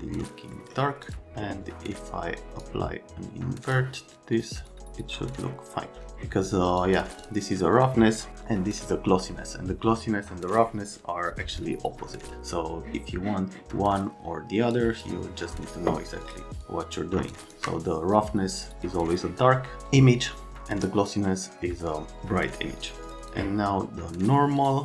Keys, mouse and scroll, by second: 0.6 right click, 1.1 click, 2.4 click, 6.8 click, 7.2 click, 7.6 click, 7.8 click, 8.8 click, 14.7 click, 16.3 click, 16.7 click, 17.4 shift+click, 18.6 click, 18.8 click, 23.1 click, 23.2 click, 24.6 click.